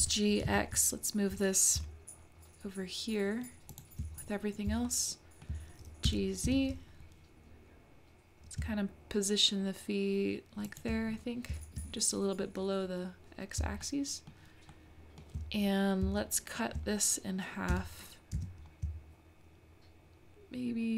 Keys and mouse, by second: 4.9-11.0 shift+middle drag, 6.0 g, 13.8 shift+middle click, 14.7-15.3 shift+middle drag, 16.2-16.7 shift+middle drag, 17.7 g.